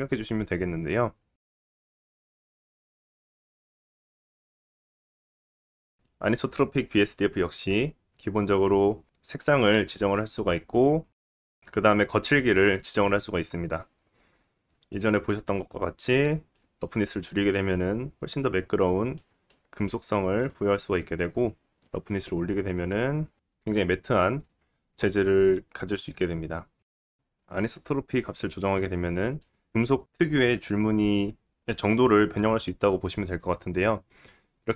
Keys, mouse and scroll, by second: 1.3 middle click, 1.3 scroll up 2, 1.6 right click, 1.6 middle click, 2.5 right click, 2.7 right click, 3.6-6.1 drag, 6.1-12.0 middle drag, 12.0-20.0 drag, 19.5 middle click, 20.0-21.5 right drag, 21.5-34.7 drag, 24.0 middle click.